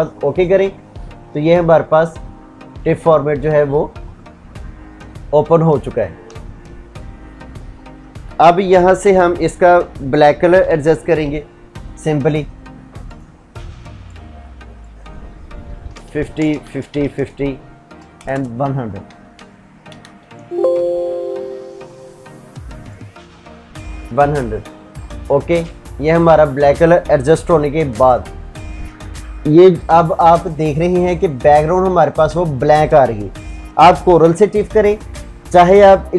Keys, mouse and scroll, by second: 5.3 ctrl+Tab, 10.2 alt+i, 10.6-11.3 typing, 12.8 click, 15.7 Tab, 18.8 shift+Tab, 19.6 Escape, 20.4 Tab, 22.6-23.2 drag.